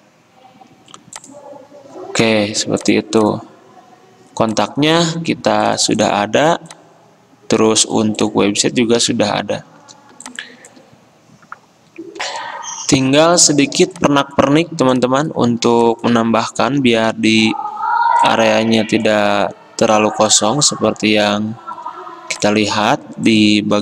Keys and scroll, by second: 8.8 Escape, 12.4 alt+Tab, 12.4 F10, 16.8 i.